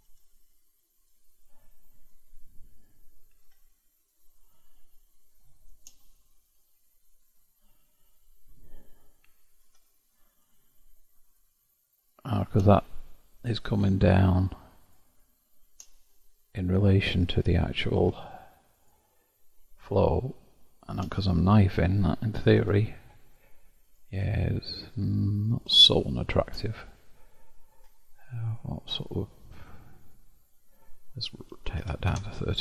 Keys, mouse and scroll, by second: 0.0-3.0 middle drag, 3.4 k, 6.9-8.8 scroll down 1, 9.6 k, 17.9 k, 21.6 middle click, 22.0-22.6 scroll down 1, 22.6 Tab, 23.1-24.2 middle drag, 24.2-24.6 scroll down 1, 24.6-26.8 middle drag, 26.8-27.4 scroll up 2, 28.4-32.6 drag.